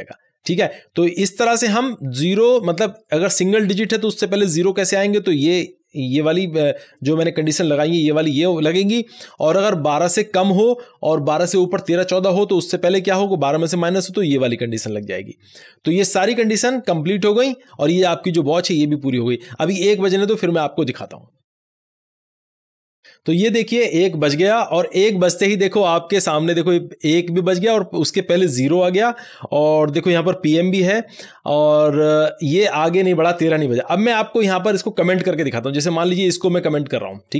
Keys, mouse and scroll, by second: 6.9-9.2 drag, 10.4 scroll up 1, 13.9-16.2 drag, 21.4 click.